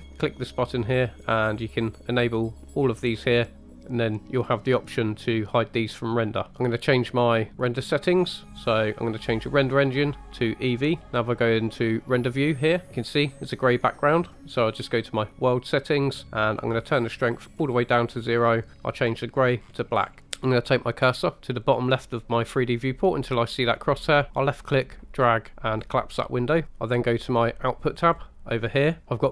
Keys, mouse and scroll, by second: 0.1-3.7 drag, 6.5 KP_0, 7.5 click, 9.5-11.8 drag, 12.3-12.9 drag, 15.1 click, 16.9 click, 18.7 click, 24.4 click, 28.0 click, 29.0-29.3 scroll up 3.